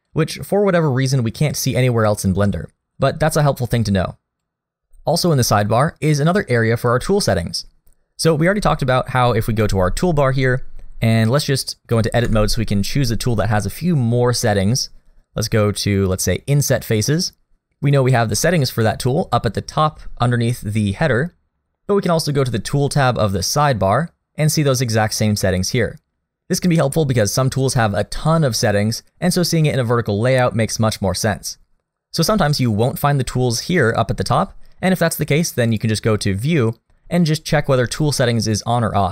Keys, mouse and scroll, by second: 0.1 click, 9.6 t, 12.2 Tab, 16.1 click, 23.4 click, 35.7 click.